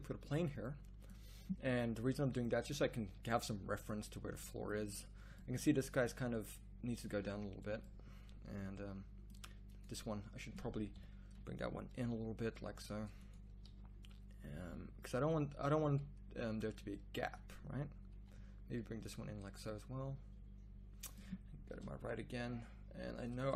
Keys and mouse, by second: 3.5-4.0 middle drag, 4.4 middle drag, 4.9-5.4 right drag, 5.4 middle drag, 10.9 KP_1, 11.9 g, 13.6 z, 15.1 g, 18.1 g, 19.0 z, 21.7 KP_3.